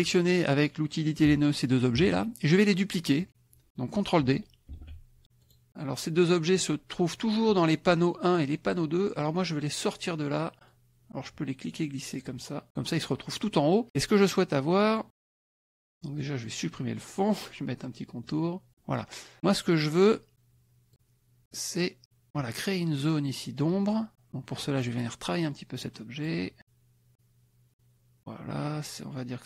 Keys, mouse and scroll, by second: 1.6 shift+click, 4.7 ctrl+d, 5.4 click, 10.7-12.4 drag, 14.9 click, 15.4 click, 15.8 shift+click, 17.1 click, 18.1 click, 21.5 click, 24.7 click, 25.4-26.5 drag, 27.1-28.2 drag.